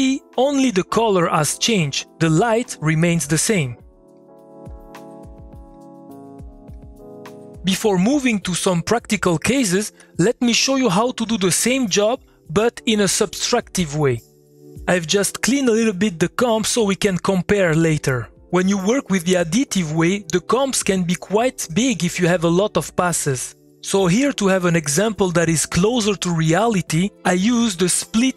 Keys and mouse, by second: 4.1-7.2 typing, 27.5 middle click, 27.9 click, 28.2 middle click.